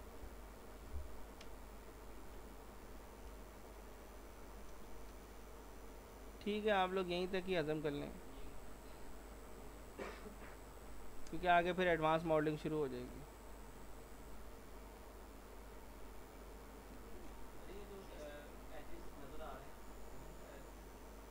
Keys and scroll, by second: 0.9 ctrl+shift+e, 4.8 ctrl+z, 8.4 Delete, 10.1 z, 11.5 ctrl+s, 17.2 ctrl+s.